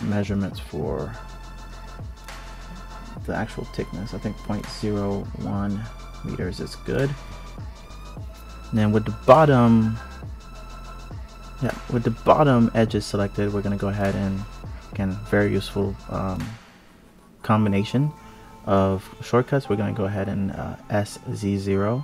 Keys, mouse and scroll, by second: 1.8 click, 3.7 x, 5.2 click, 6.4 click, 8.9 click, 10.4 click, 11.5 ctrl+shift+click, 12.5 s, 14.7 KP_1, 15.0 KP_3, 15.7-16.3 scroll up 1, 16.3-17.4 scroll up 3, 17.4 click, 20.9 click, 21.8 click.